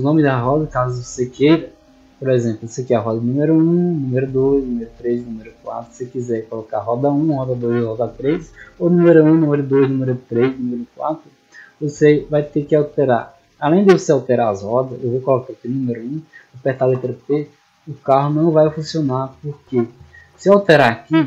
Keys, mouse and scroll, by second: 2.5 right click, 3.1-3.4 middle drag, 4.0 right click, 4.6 right click, 5.5 right click, 6.1-6.7 middle drag, 8.0-8.4 middle drag, 14.5 right click, 15.3 click, 15.9 click.